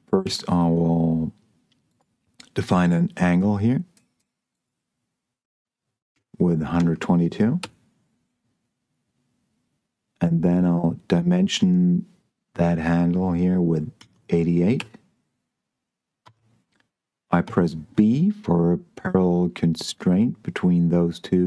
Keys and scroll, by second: 0.5 d, 6.4 1, 6.8 2, 7.6 Return, 14.2 8, 14.7 Return, 16.5 Escape, 17.4 b.